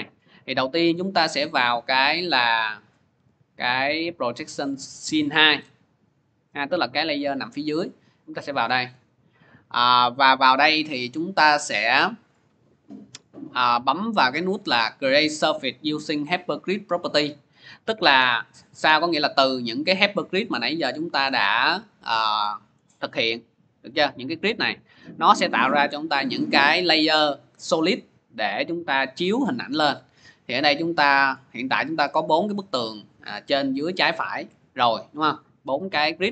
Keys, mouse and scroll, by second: 0.5 click, 4.9 click, 5.2 click, 7.3 click, 8.2 click, 10.3 click, 14.2 click, 18.6 click, 19.1 scroll, 19.9 scroll, 21.2-21.6 scroll, 24.9 middle click, 26.3 click, 29.9-31.3 drag, 31.5-36.3 middle drag.